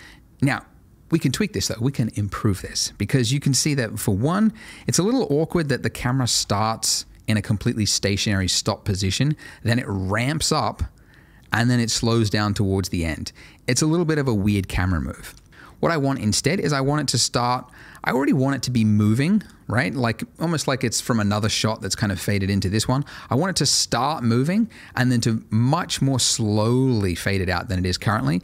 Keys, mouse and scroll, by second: 0.4 space, 3.3 click, 6.3 space, 14.8 Escape, 17.5 click, 25.6 click, 28.1 space.